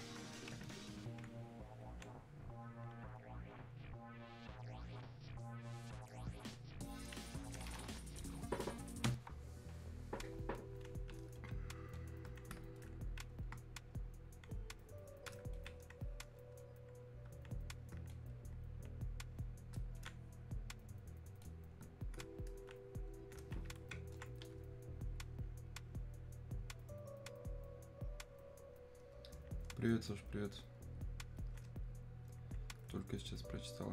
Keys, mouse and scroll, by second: 11.1 click, 11.4-14.5 alt+drag, 15.6-18.1 alt+drag, 18.1-24.2 drag, 29.8 click, 30.3-33.9 alt+drag.